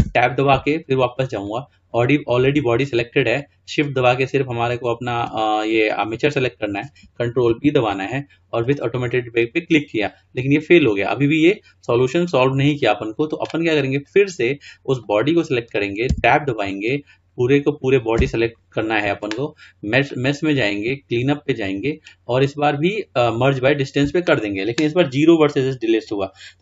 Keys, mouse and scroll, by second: 0.1 Tab, 1.5-2.2 drag, 4.0 shift+click, 7.6 ctrl+p, 14.2 click, 15.2 click, 16.3 Tab, 18.3 a, 20.1-22.9 drag.